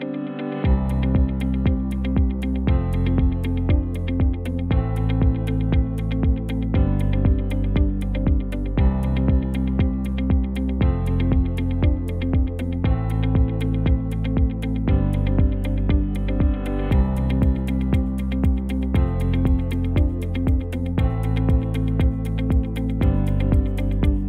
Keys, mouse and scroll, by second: 6.9 Tab, 8.4 g, 10.9 Tab.